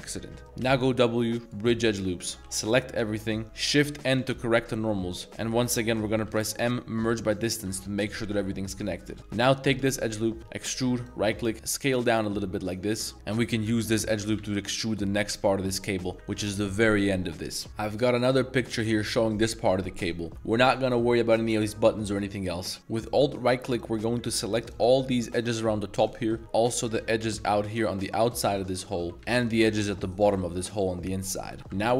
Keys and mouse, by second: 0.4 z, 0.6 w, 2.0-2.3 drag, 2.3 z, 2.4 z, 3.2 a, 4.1 shift+n, 4.7-5.3 middle drag, 6.3 m, 8.8 middle click, 9.2 1, 9.4 alt+click, 10.5 e, 11.5 s, 13.4 e, 13.8 click, 14.1 g, 14.4 z, 15.7 click, 17.7 ctrl+s, 22.8 alt+2, 23.0 alt+click, 23.7 alt+shift+click, 24.6 alt+shift+click, 25.3 alt+shift+click, 26.1 shift+middle drag, 26.9 alt+shift+click, 27.6 alt+shift+click, 28.5 alt+shift+click, 29.1 z, 29.4 alt+shift+click, 29.7 z, 30.7 z, 30.9 click, 31.2 z, 31.6 ctrl+b, 31.8 ctrl+b.